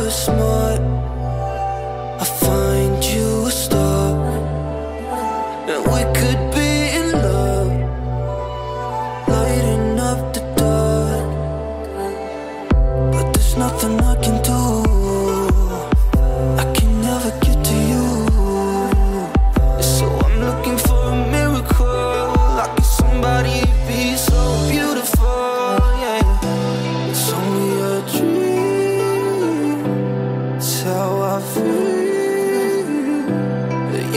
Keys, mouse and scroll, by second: 6.3 alt+scroll down 1, 9.2-9.5 alt+scroll up 1, 9.9 alt+scroll up 1, 10.2 space, 10.3 click, 10.6 alt+scroll down 1, 11.3 alt+scroll up 1, 11.5 alt+scroll down 1, 12.7 click, 19.2 click, 20.9 shift+Num_Lock, 20.9 click, 21.1 shift+F6, 22.3 Return, 23.8 ctrl+l, 25.1-28.1 drag, 31.5 ctrl+d, 31.8-33.0 alt+scroll down 1, 33.0-33.4 alt+scroll up 1, 33.8 space, 33.9-34.1 click.